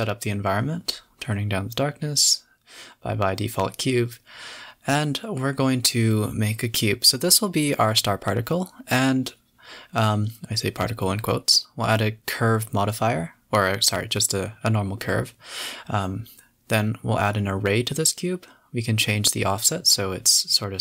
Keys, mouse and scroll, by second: 0.8 click, 1.9 click, 2.3 drag, 3.6 x, 5.1 shift+a, 6.7-7.2 scroll up 4, 7.2-7.6 middle drag, 7.6 KP_7, 8.1-8.6 scroll down 6, 8.9 scroll up 4, 9.3 s, 11.1 shift+a, 12.6 click, 12.8 s, 13.7 KP_Decimal, 14.2 s, 14.7-15.5 scroll down 17, 15.5 s, 16.9 click, 17.4 click, 17.6-18.3 drag, 18.3 scroll down 1, 19.2-20.8 drag.